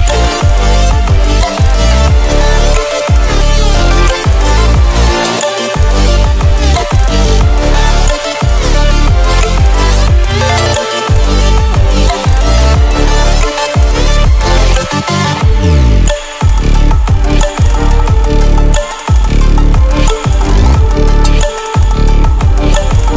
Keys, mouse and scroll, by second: 0.3-2.9 typing, 4.3-5.4 typing, 7.1-12.6 drag, 8.9-9.7 typing, 13.1-14.8 typing, 13.2 click, 16.2-17.0 typing.